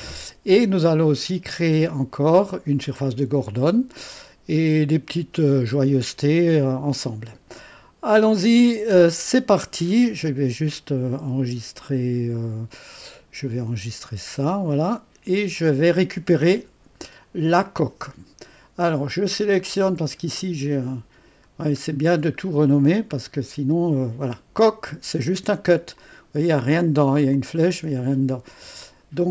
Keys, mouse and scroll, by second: 0.0-1.8 drag, 3.4-7.7 drag, 13.7 ctrl+s, 19.3-20.2 scroll up 1, 20.2-23.6 scroll down 1, 23.6-24.6 scroll down 1, 24.6 click, 26.0 click, 27.3-28.4 drag, 28.8 click.